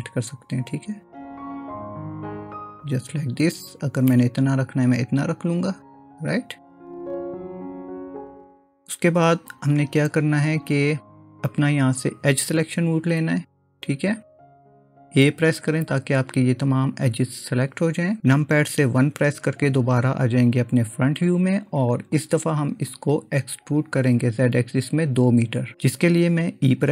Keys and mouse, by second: 4.1-8.5 middle drag, 13.7-15.7 drag, 15.7 a, 19.0 KP_1, 22.2 click.